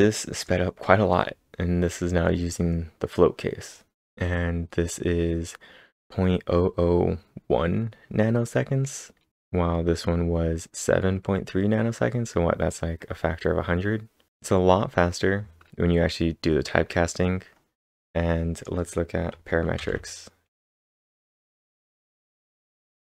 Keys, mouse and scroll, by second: 0.3 click, 1.5-2.4 scroll up 7, 8.5 scroll down 1, 9.7-11.5 scroll up 1, 11.9 scroll down 1, 12.1-14.0 scroll down 2, 14.5 scroll down 1, 17.2 scroll down 1, 17.3-18.1 scroll down 5, 18.6 click, 19.8 ctrl+/, 20.5 k, 21.0 ctrl+/, 21.4 ctrl+s, 22.1 ctrl+', 22.5 Up, 22.9 Return.